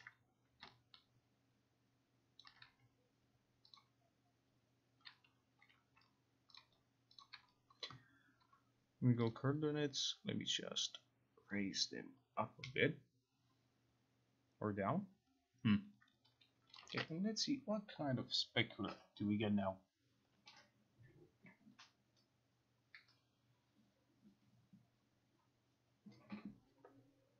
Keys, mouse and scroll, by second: 2.5 ctrl+click, 3.8 click, 7.3 shift+click, 9.4 click, 16.9 click, 17.0 ctrl+r.